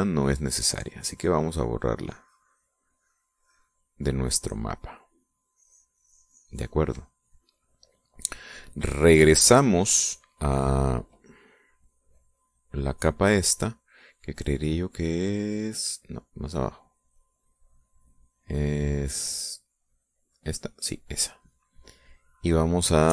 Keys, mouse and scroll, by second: 0.3-8.1 drag, 9.6 click, 13.0-14.4 drag, 15.2 click, 15.6 click, 17.2 click, 18.0 click, 20.9 click, 21.3 click, 22.5 middle click, 22.9 middle click.